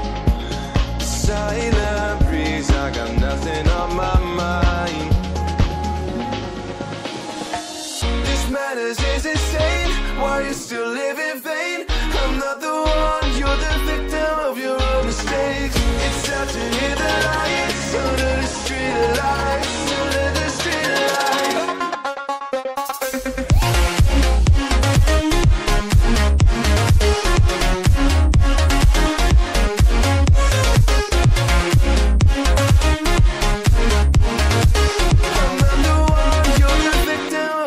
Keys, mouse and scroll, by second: 0.9 scroll down 1, 3.7 click, 13.0-13.4 scroll up 1, 13.8 click, 16.7-18.7 scroll down 1, 18.9 click, 19.5-20.1 scroll up 1, 20.1 click, 27.2 double click, 28.4-28.7 scroll up 1, 28.7 click, 33.0-33.5 scroll down 1, 34.3 shift+click, 37.2 right click.